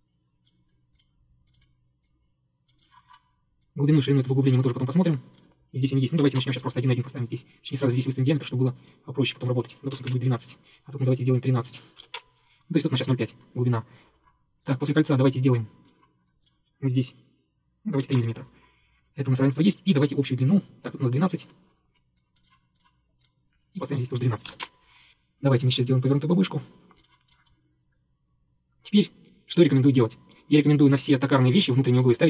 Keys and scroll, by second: 6.3 1, 6.5 Return, 9.7-10.7 typing, 11.8-12.6 typing, 15.1 Escape, 18.1 typing, 18.2 Return, 21.5 Escape, 22.2 Escape, 24.3-25.0 typing.